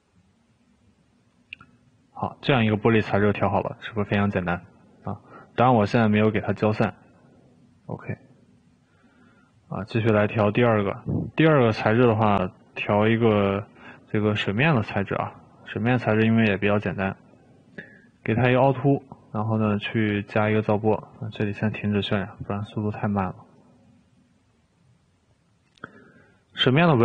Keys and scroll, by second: 21.4 Escape.